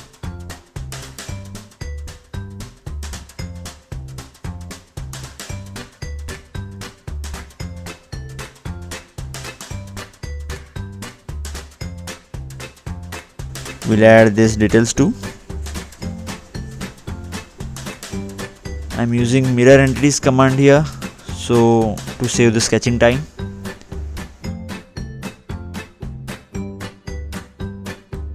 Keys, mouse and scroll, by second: 2.5 click, 2.8-3.6 scroll up 2, 4.6 click, 4.6 middle click, 5.2 scroll down 2, 9.9-10.3 scroll up 2, 10.9 scroll up 2, 11.0 middle click, 12.7 click, 16.0 Delete, 17.7 click, 18.3 click, 20.4 click, 22.1 right click, 23.8 click, 25.6 click, 27.1 click.